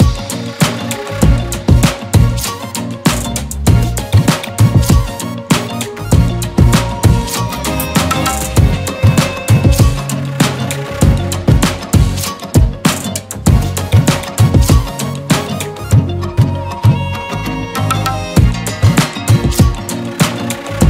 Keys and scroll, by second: 6.6 ctrl+z, 7.7 e, 8.9 b, 10.0 ctrl+z, 13.9 ctrl+z, 14.4 ctrl+z, 15.1 ctrl+z, 17.8 e, 18.2 b, 18.7 ctrl+z, 19.8 ctrl+z.